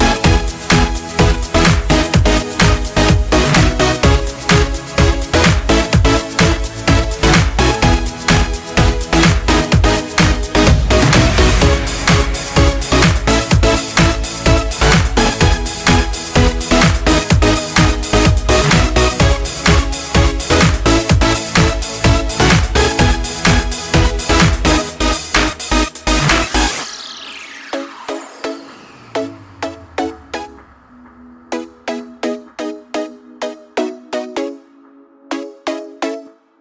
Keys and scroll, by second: 1.5 ctrl+space, 5.5 ctrl+space, 15.4-16.9 typing, 16.9 Return, 23.2-24.7 typing, 24.8 Return, 33.8-36.6 typing.